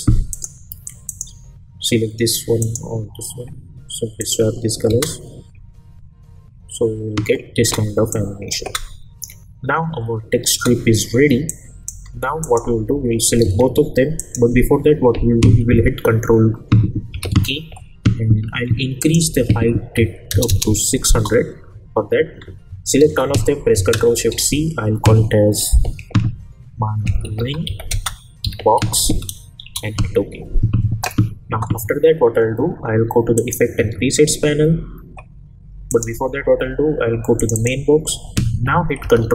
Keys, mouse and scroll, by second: 4.9 space, 7.5 space, 8.1-8.7 click, 8.6 space, 11.5-12.1 click, 13.4 ctrl+a, 14.2 click, 17.1 ctrl+k, 19.0 click, 21.1 Return, 23.0 ctrl+a, 24.3 ctrl+shift+c, 26.8-29.5 typing, 29.6 Return, 33.3 click, 33.8 ctrl+a, 35.9 click, 39.0 ctrl+k.